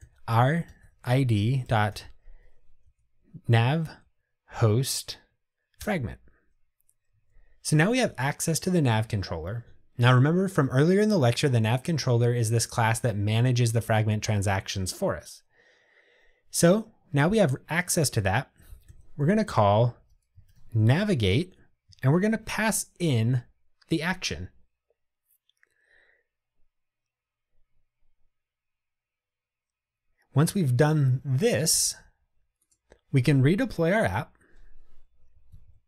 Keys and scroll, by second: 5.9 Return, 23.3 Escape, 32.8 ctrl+r.